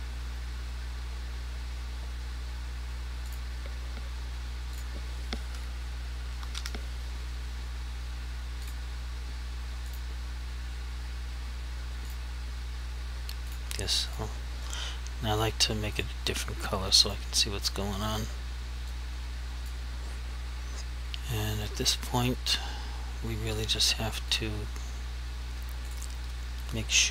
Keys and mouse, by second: 3.3 click, 6.3 typing, 8.7 click, 19.0 click, 24.4 click.